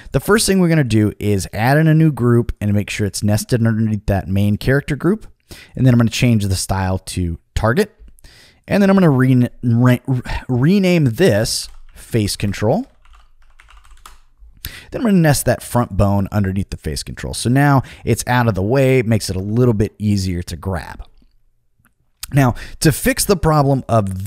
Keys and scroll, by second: 11.3-14.4 typing, 19.2 super+z.